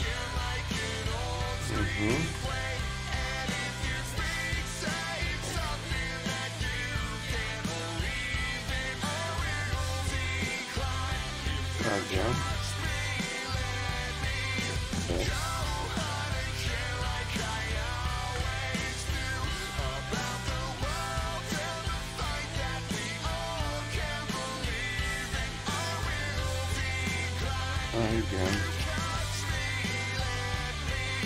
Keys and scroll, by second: 3.6 ctrl+z, 6.8 ctrl+z, 6.8 y, 20.7 s.